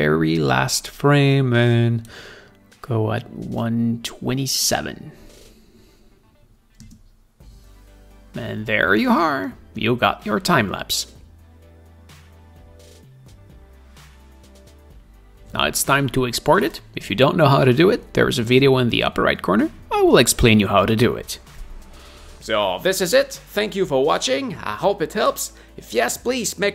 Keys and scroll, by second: 7.5 space.